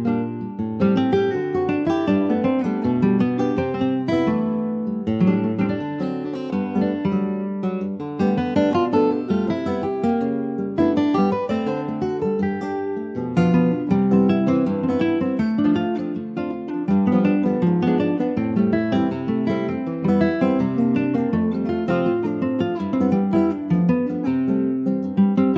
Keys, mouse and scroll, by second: 1.8 Tab, 2.1 click, 2.3 scroll down 3, 2.6 middle click, 3.3 ctrl+s, 3.4 click, 3.7-5.5 middle drag, 5.5 ctrl+s, 5.6 click, 6.0 shift+middle click, 6.7 ctrl+s, 6.8 click, 7.2 middle click, 7.6 ctrl+s, 7.7 click, 8.0 middle click, 8.8 ctrl+s, 8.8 click, 9.3-9.7 scroll down 2, 9.7-10.8 middle drag, 10.8 scroll up 1, 11.0 ctrl+s, 11.3 middle click, 11.4-11.8 scroll up 2, 11.8 shift+middle click, 12.6 click, 12.9-13.4 scroll up 1, 13.4 shift+middle click, 14.1 ctrl+r, 17.9 middle click, 18.1 scroll up 1, 18.4 shift+middle click, 19.2 3, 19.6 click, 20.0 scroll down 2, 20.2-21.3 middle drag, 21.3 shift+click, 21.7 alt+middle click, 24.1 e, 25.2-25.5 middle drag.